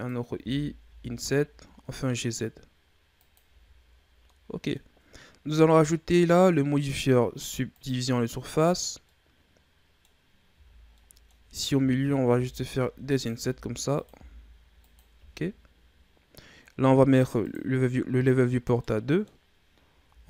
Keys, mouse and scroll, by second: 0.2 g, 3.4 Tab, 3.8-4.2 scroll down 2, 4.2-4.9 middle drag, 4.9 scroll up 1, 6.2-9.0 drag, 9.0-10.1 middle drag, 10.1 scroll up 2, 10.4 Tab, 10.8-12.2 middle drag, 12.2 i, 13.3 i, 15.1 Tab, 15.7-16.6 scroll down 2, 16.6-17.3 scroll down 1, 17.3-18.4 drag, 18.4 scroll down 1, 18.7-19.9 middle drag, 19.9 w.